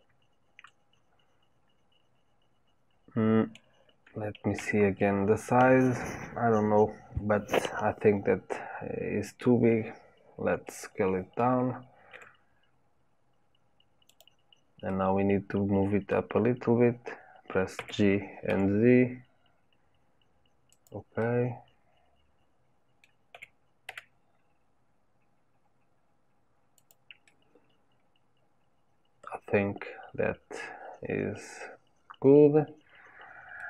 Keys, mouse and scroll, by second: 4.5 KP_7, 10.6-12.0 middle drag, 12.0 s, 17.7 g, 21.1-23.3 middle drag, 23.3 g, 27.2-30.2 middle drag.